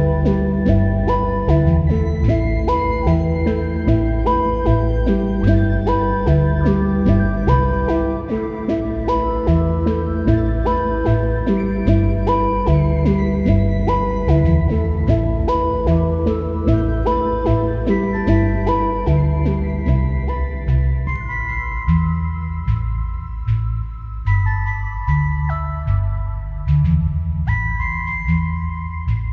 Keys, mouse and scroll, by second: 3.8 click, 6.0-9.6 drag, 10.4 click, 11.7 click, 13.1-16.5 drag, 16.5 scroll down 1, 16.8 click, 18.1 typing, 18.5 click, 19.3 ctrl+t, 19.6 click, 20.4 click, 21.2 click.